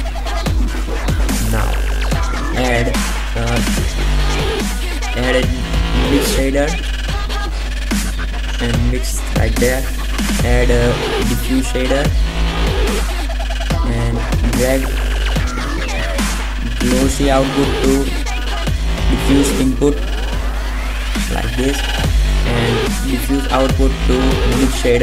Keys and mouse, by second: 3.0 shift+a, 8.6 click, 9.0 shift+a, 15.8 click, 17.0 g, 19.5-19.9 drag, 20.5 click, 22.0-23.2 drag, 23.9-25.0 drag.